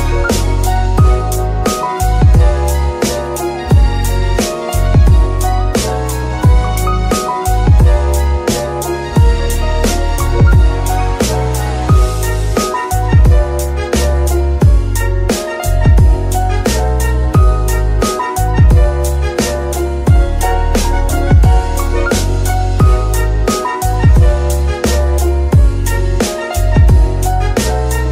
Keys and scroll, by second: 1.3 KP_3, 23.1 g.